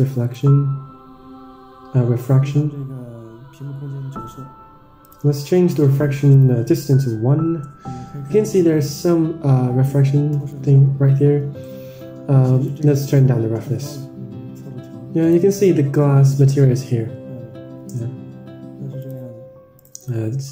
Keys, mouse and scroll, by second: 0.0 click, 5.6-6.7 drag, 8.9-11.0 middle drag, 11.3 KP_0, 13.2-15.9 drag, 19.0-19.6 drag, 20.2 click.